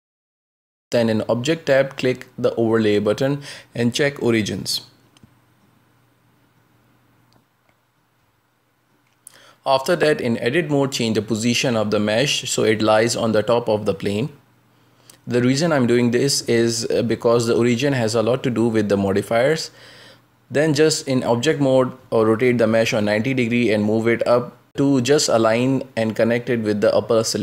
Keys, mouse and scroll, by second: 0.4-4.0 middle drag, 4.0 Tab, 5.7-8.5 drag, 8.5 Tab, 9.3 g, 14.5 Tab, 14.9 r, 18.2 scroll down 1, 18.2 shift+middle click, 18.9-19.3 scroll down 2, 19.3 g, 20.0 shift+middle click, 20.4 scroll up 1, 20.6 g, 21.5-21.8 scroll up 3, 21.8 g, 23.2 middle click, 23.9-24.3 scroll up 1, 24.3 g, 26.5 g.